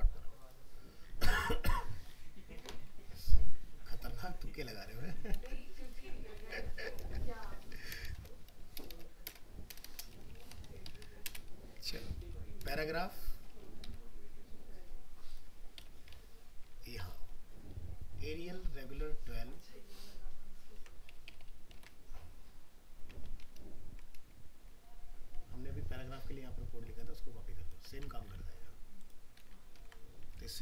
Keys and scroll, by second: 5.3 ctrl+c, 6.4 ctrl+v, 20.8 ctrl+c, 21.8 alt+Tab, 28.0 ctrl+c, 29.4 ctrl+v, 29.8 ctrl+s.